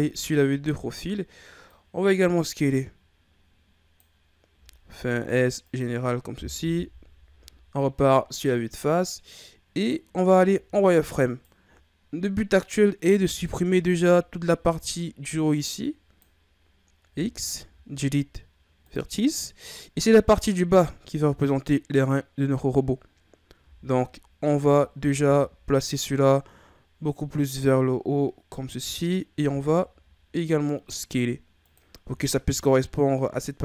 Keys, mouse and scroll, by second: 1.7-4.5 drag, 4.5 s, 6.6 KP_1, 10.5 z, 11.3 right click, 13.2 b, 18.9 x, 19.9-22.9 scroll down 1, 23.6 z, 24.6 a, 24.9 a, 25.2 a, 25.9-28.9 drag, 29.4 s, 32.3-33.6 shift+scroll up 2.